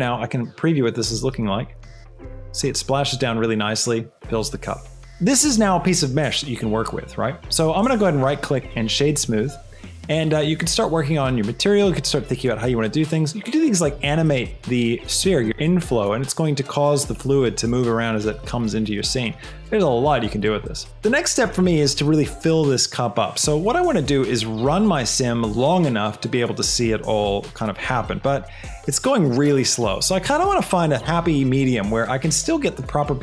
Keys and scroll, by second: 1.1 space.